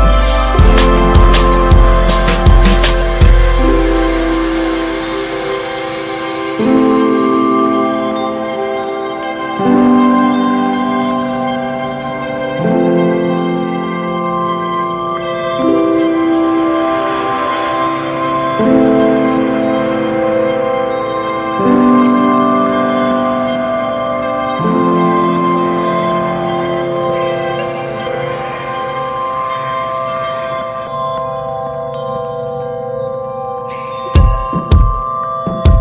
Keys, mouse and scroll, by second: 0.0 scroll down 1, 0.4 click, 1.3 alt+z, 1.5 scroll up 2, 1.7 middle click, 2.3 scroll up 1, 2.7 middle click, 3.2 e, 6.8 Tab, 8.3-8.9 scroll up 1, 8.9-9.4 middle drag, 9.4 Tab, 10.0 alt+z, 10.3 shift+middle click, 10.6 shift+scroll up 1, 10.8 click, 11.3 middle click, 11.6 alt+z, 11.8 shift+middle click, 11.9 scroll up 3, 12.1 Tab, 12.3 middle click, 12.6 Tab, 13.6 3, 13.7 click, 14.1 alt+middle click, 14.4-14.7 scroll down 3, 15.0 click, 16.4 s, 18.9 click, 19.8 Tab, 19.9 click, 20.2 scroll down 1, 20.4 shift+middle click, 20.6-21.7 scroll up 7, 20.8 Tab, 20.9 middle click, 21.3 shift+middle click, 21.8-24.3 middle drag, 24.3 click, 26.0 ctrl+r, 27.8 ctrl+r, 29.3 Tab, 29.5 click, 29.6 scroll down 3, 29.8 middle click, 30.6-31.4 scroll up 2, 30.9 Tab, 31.4 shift+middle click, 31.7 alt+z, 32.0 scroll down 3, 32.2 shift+middle click, 32.4 shift+scroll up 1, 33.8 ctrl+r, 34.9 Tab, 35.0 drag, 35.3 scroll down 1, 35.5 alt+z.